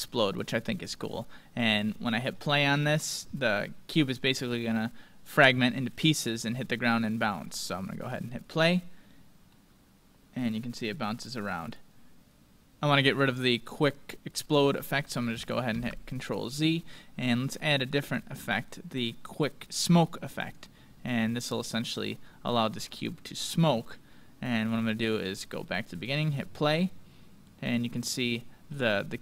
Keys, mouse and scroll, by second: 1.0-3.6 middle drag, 3.6-4.5 scroll down 1, 4.5-5.3 scroll up 1, 5.3 scroll up 1, 6.8 middle click, 7.4-8.4 scroll up 1, 8.4-10.2 drag, 9.5-11.4 middle drag, 21.2-22.1 scroll down 1, 22.1-24.0 middle drag, 25.2-27.9 drag.